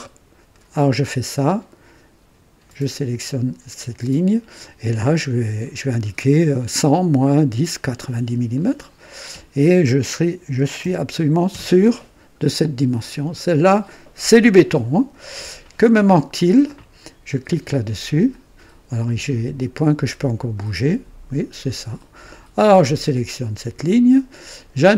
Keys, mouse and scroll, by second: 0.4 click, 2.6 click, 8.4 click, 10.4-11.6 typing, 11.4 KP_Enter, 17.8 click, 20.6-22.3 drag, 23.2 click.